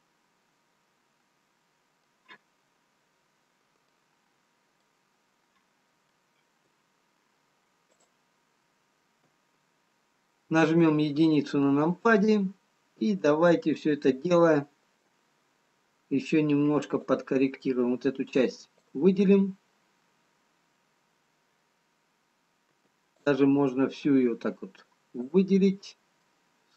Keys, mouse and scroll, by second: 3.8 middle click.